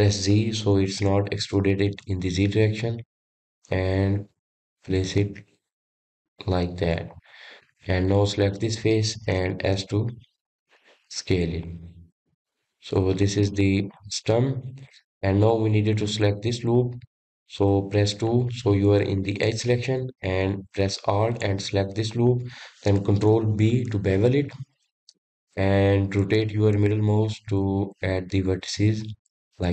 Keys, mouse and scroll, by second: 8.3 click, 8.8 middle click, 9.6 click, 10.5 s, 12.3-12.9 scroll down 1, 12.9-15.1 middle drag, 15.1-16.1 scroll up 5, 16.1 click, 16.7-19.5 scroll up 5, 19.5 2, 20.6 click, 22.5 alt+click, 24.9 ctrl+b.